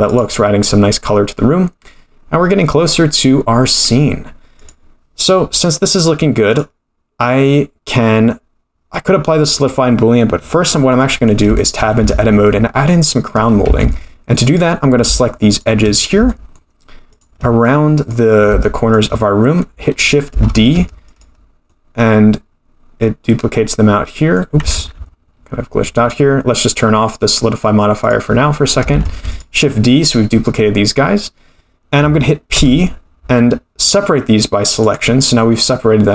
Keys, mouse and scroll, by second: 0.1 click, 4.6 click, 6.5-9.6 drag, 10.9-11.2 middle drag, 11.5 shift+middle drag, 12.0 Tab, 12.3-13.6 scroll up 6, 13.6 2, 14.4 click, 15.5 shift+click, 16.0 scroll down 3, 16.3 shift+middle click, 17.1 shift+click, 17.6 middle click, 18.6 shift+middle click, 20.5 shift+d, 21.6-24.4 middle drag, 24.7 ctrl+z, 28.0 click, 29.0 shift+d, 32.5 p.